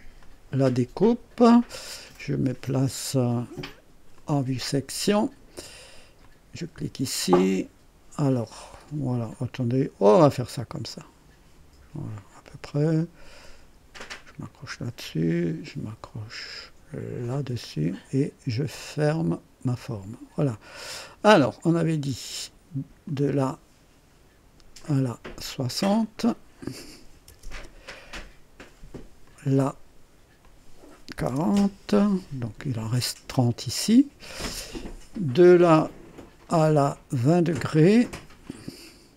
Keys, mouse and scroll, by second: 0.2 right click, 4.2 click, 6.2 click, 10.0 click, 12.6 click, 14.4 click, 17.2 click, 19.6 click, 20.1 right click, 20.7 right click, 23.0 click, 24.8 click, 26.0 click, 27.1 KP_6, 27.3 KP_0, 27.5 KP_Enter, 29.2 click, 30.4 click, 31.1 KP_4, 31.2 KP_0, 31.5 Return, 35.5 click, 36.4 click, 38.4 click.